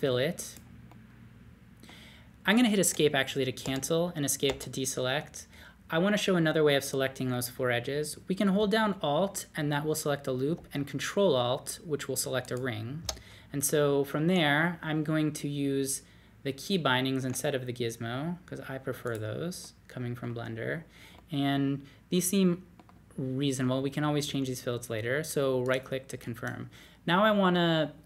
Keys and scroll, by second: 3.6 ↺, 4.5 ↺, 17.2 d.